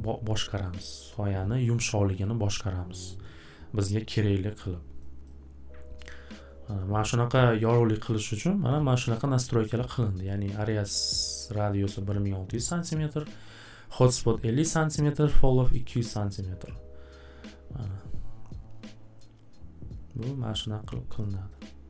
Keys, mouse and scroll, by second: 5.2 click, 10.2 click, 11.2 click, 12.8 click, 14.6 click, 16.0 click, 20.7 click, 21.2 click.